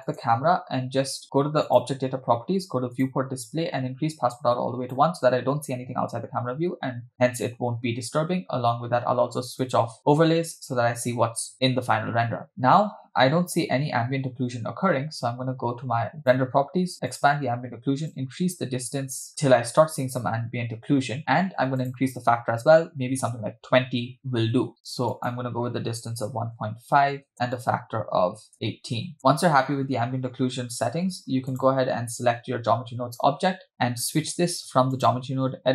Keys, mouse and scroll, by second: 0.1 click, 1.7 click, 3.0 click, 3.5-4.3 scroll down 1, 4.3 scroll down 3, 4.4 click, 9.8 click, 13.1-16.1 scroll up 3, 16.1 scroll up 2, 16.2 click, 17.1 click, 18.1-19.3 drag, 19.4-20.0 scroll down 1, 20.0-21.1 scroll down 1, 21.8-23.4 drag, 25.1-27.3 drag, 27.6-29.2 drag, 29.2 space, 31.5 click, 34.9-35.7 drag.